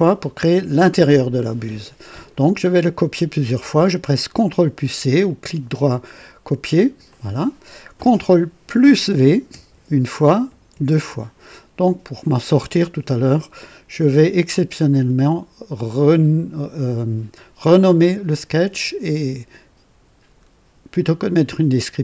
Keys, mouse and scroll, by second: 5.2 right click, 7.0 click, 9.4 ctrl+v, 10.7 ctrl+v, 13.1 click.